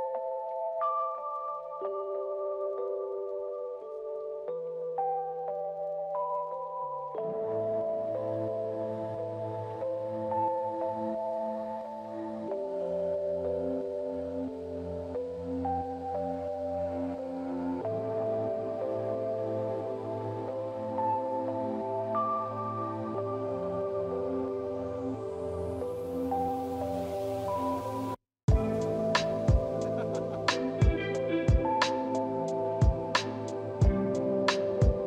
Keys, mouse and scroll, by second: 22.8 double click, 23.7 double click, 23.7 scroll up 1, 24.5 middle click, 24.5 middle click, 26.0 p, 26.8 scroll up 1, 32.2 double click.